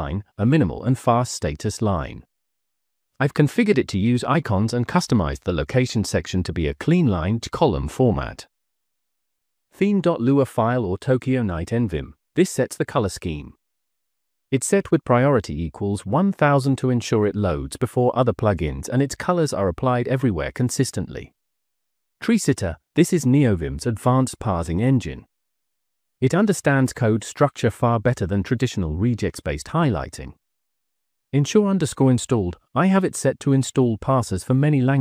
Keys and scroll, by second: 0.3 Return, 0.9-4.5 typing, 8.6 Escape, 9.7 -, 10.2 j, 10.4 Return, 11.1 j, 11.3 j, 16.2-18.2 typing, 19.7-20.6 typing, 22.3-23.0 typing, 23.3 Return, 24.4 j, 24.9 j, 25.5 j, 26.5 j, 31.3-34.4 typing, 34.8 Escape.